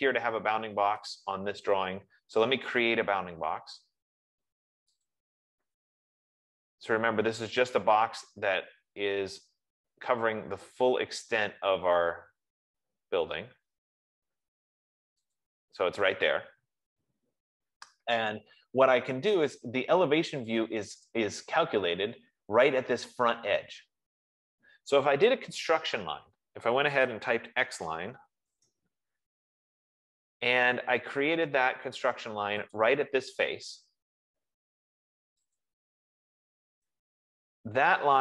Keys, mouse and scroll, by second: 1.5 click, 5.5 click, 15.7 click, 20.1 middle click, 21.5 click, 26.3 Escape, 27.6-28.9 typing, 31.2-31.9 typing, 33.1-35.2 drag, 35.9 click.